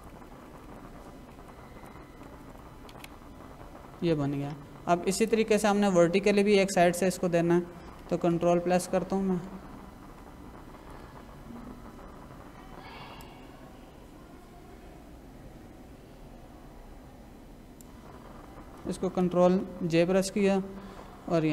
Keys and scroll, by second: 2.2 Up, 2.9 Down, 8.3 ctrl+=, 10.7 ctrl+-, 19.8 ctrl+j, 21.3 Left.